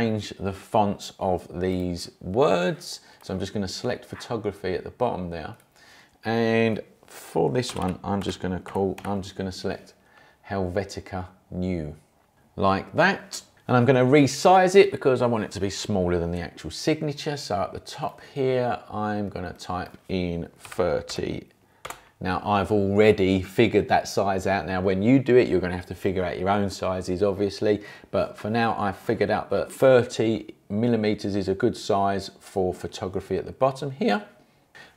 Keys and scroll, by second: 7.4-9.5 typing, 20.6 3, 21.1 0, 21.8 Return.